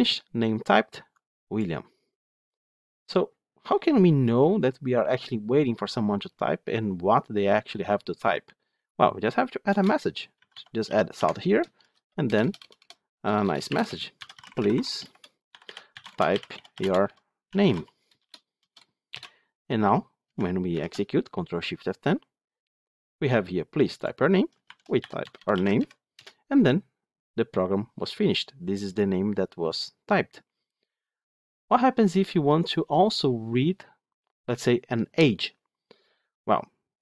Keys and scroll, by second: 11.1 Tab, 14.0 Tab, 20.6 ctrl+shift+F10.